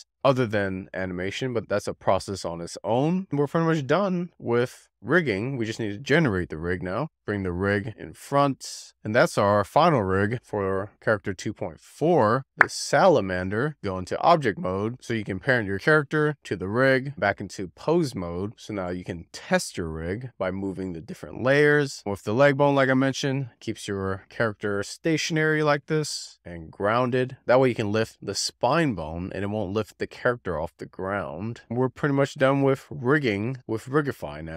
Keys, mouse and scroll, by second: 0.0 click, 0.2 click, 0.6-1.0 scroll down 4, 1.2 click, 2.3 click, 2.8-3.1 scroll down 2, 3.2-4.4 shift+middle drag, 5.9-6.9 drag, 6.9 shift+middle click, 8.6 click, 8.9 scroll up 3, 9.0 middle click, 10.3 middle drag, 10.5 scroll up 2, 10.6-11.4 middle drag, 12.3 click, 12.5 middle click, 13.7 click, 14.2 shift+click, 14.7 ctrl+p, 17.6-19.3 drag, 19.3-25.5 middle drag, 25.5 click, 31.5 z, 31.8-32.2 middle drag, 33.4-34.5 shift+middle drag.